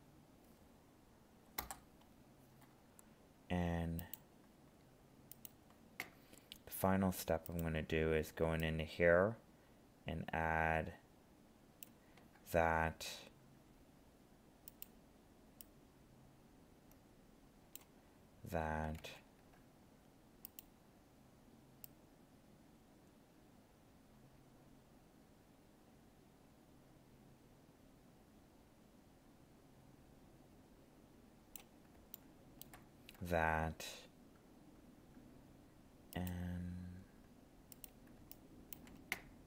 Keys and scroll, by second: 19.0 ctrl+z.